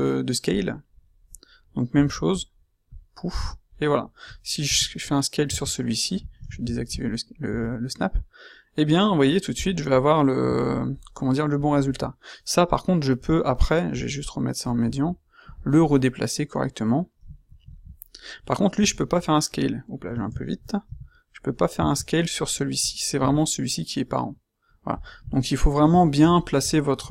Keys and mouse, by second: 4.6 s, 6.4 shift+Tab, 7.4 s, 11.5-13.2 right drag, 18.8 q, 20.8 s, 23.2 s, 24.8 click, 25.1 q.